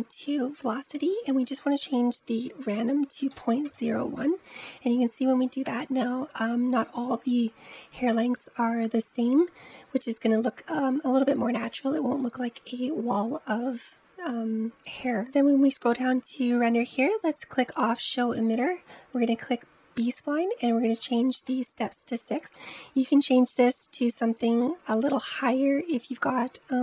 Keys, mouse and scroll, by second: 0.0-1.6 scroll down 3, 1.6-4.5 drag, 15.1-17.7 scroll down 10, 17.7 click, 19.2 click, 19.8-25.3 drag.